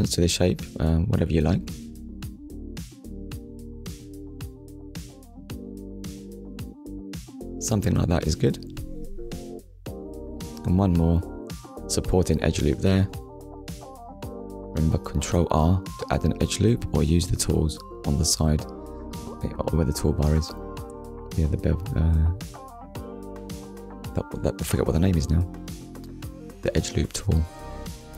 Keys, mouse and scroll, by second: 0.5 click, 1.3 alt+click, 4.0 click, 5.0 alt+click, 8.4 click, 9.8 ctrl+r, 11.3 click, 12.0 right click, 15.8 click, 17.2 middle click, 19.6 alt+click, 22.2 click, 23.3 click, 25.8 alt+click, 26.8 click.